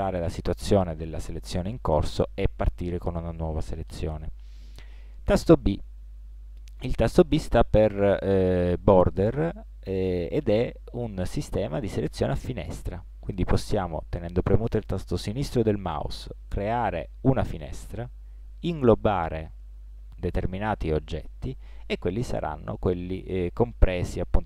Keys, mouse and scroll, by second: 6.0 b.